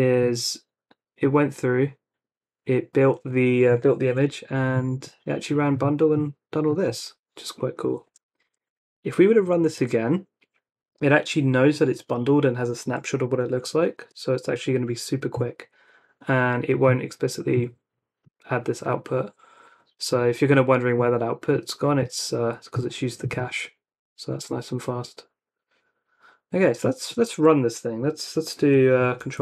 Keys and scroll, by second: 8.6 Up, 14.1 Return, 29.2 ctrl+r.